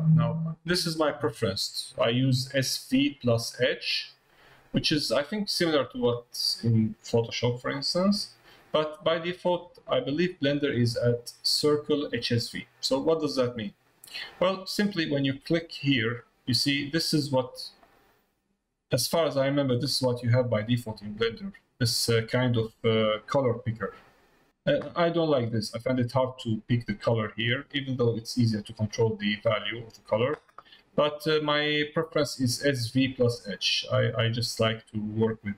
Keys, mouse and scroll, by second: 15.4 click, 17.9 middle click, 19.1 middle click, 19.9 middle click, 20.7 click, 22.4 middle click, 23.8 click, 34.4 click.